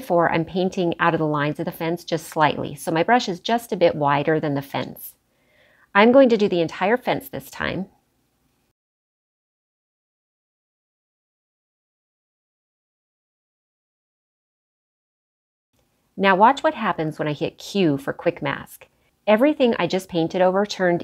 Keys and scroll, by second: 9.8 ], 10.3 [, 10.8 ], 17.4 q.